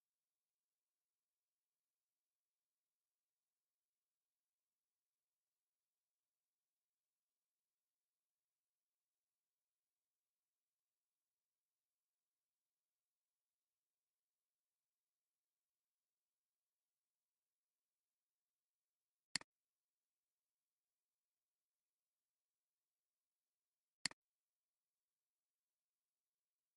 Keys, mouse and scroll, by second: 25.9-26.7 typing.